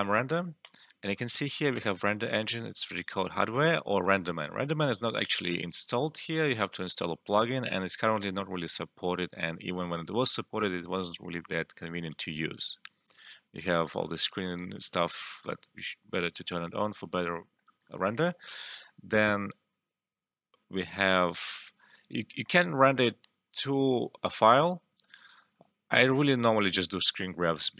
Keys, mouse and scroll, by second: 2.9 click, 6.2 click, 13.5 click.